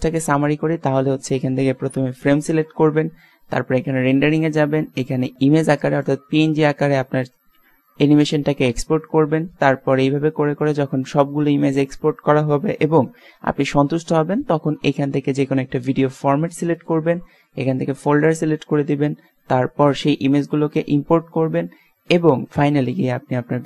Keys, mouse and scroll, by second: 0.6 click, 3.9-5.7 middle drag, 5.7-6.3 drag, 9.2-14.6 middle drag, 15.7-17.6 drag, 20.0-23.6 middle drag.